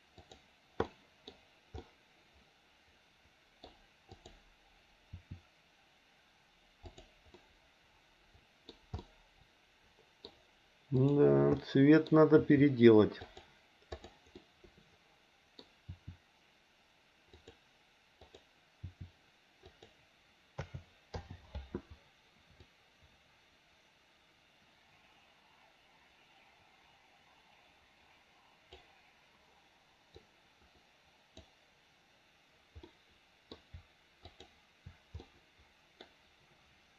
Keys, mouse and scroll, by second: 0.2 click, 0.8 middle click, 1.8-3.6 middle drag, 4.1 click, 5.1 r, 7.3-8.6 middle drag, 9.0-10.3 middle drag, 11.0 click, 11.6 middle click, 12.3 r, 14.3-15.6 middle drag, 15.8 r, 18.2 click, 18.8 r, 20.6 a, 21.2 i, 22.6-28.8 drag, 30.1-31.5 drag, 32.8 middle click, 34.2 shift+click, 35.3 middle click.